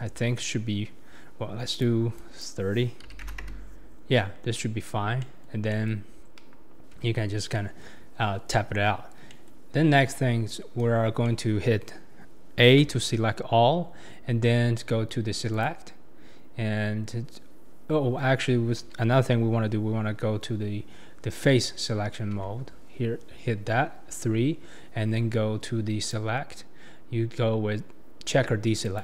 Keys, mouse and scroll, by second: 1.7-4.5 drag, 4.5 scroll down 1, 4.5-5.6 middle drag, 5.6 scroll up 1, 5.8 middle click, 7.0 Tab, 7.5-8.1 middle drag, 8.1-8.8 scroll up 3, 8.8-9.2 scroll down 4, 9.2 scroll up 1, 9.3 middle click, 9.9 Tab, 11.2-12.9 middle drag, 12.9 a, 15.5-22.4 drag, 22.4 3, 26.0-29.0 drag.